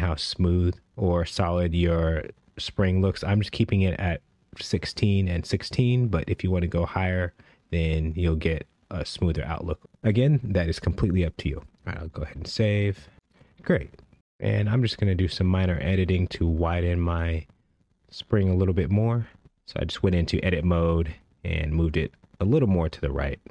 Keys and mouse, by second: 8.4-9.8 drag, 14.5 shift+middle drag, 15.3 shift+middle drag, 16.8 Tab, 18.4 g, 18.8 y, 20.4 g, 20.4 x, 23.2 click.